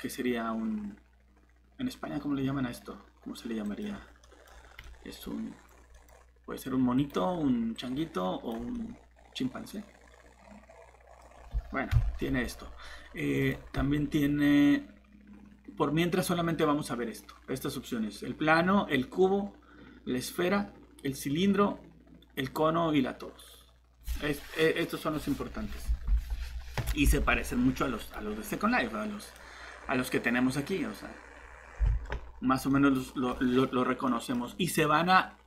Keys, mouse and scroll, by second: 4.2 middle click, 4.5 scroll down 1, 4.8 middle click, 6.9 click, 8.7 middle click, 11.3-11.9 scroll up 1, 11.9 Delete, 13.4 click, 27.1 alt+Tab, 28.0 right click, 29.2 click, 31.8 alt+Tab, 32.7 middle click, 33.4 scroll up 1, 34.1 middle click.